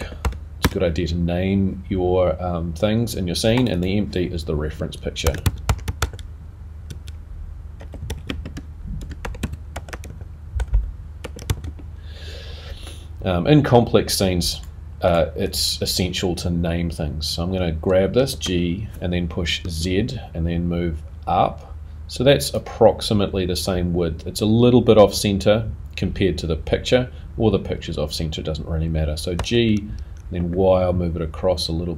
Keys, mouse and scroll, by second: 3.6 click, 4.8 click, 12.9 BackSpace, 15.5 click, 23.1 scroll up 3.